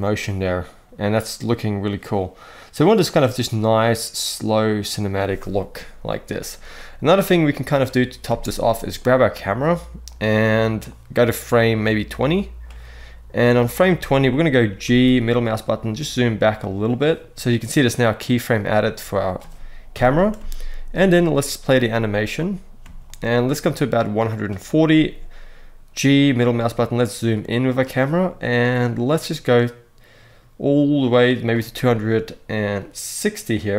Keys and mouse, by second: 8.0 space, 8.3 click, 9.9-12.4 drag, 14.6 g, 14.9 middle click, 18.2-19.7 middle drag, 19.7 KP_0, 20.1 space, 22.6 space, 22.8-24.2 drag, 24.6 g, 25.9 middle click, 27.4 click, 28.1-31.2 drag, 32.5-33.7 drag.